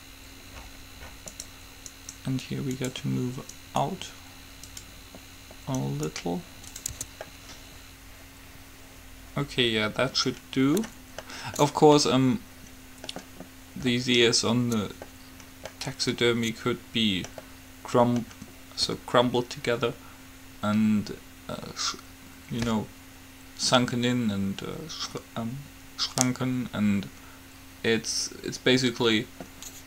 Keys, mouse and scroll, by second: 0.1-1.6 right drag, 2.1-5.3 right drag, 6.1-7.9 right drag, 7.1 Tab, 7.9 middle click, 11.5 middle click.